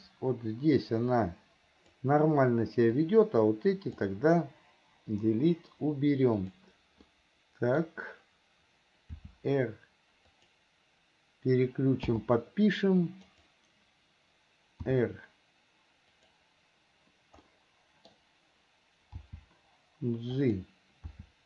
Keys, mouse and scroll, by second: 3.1-4.2 drag, 6.6 click, 7.3 middle click, 13.5 click, 17.6 middle click.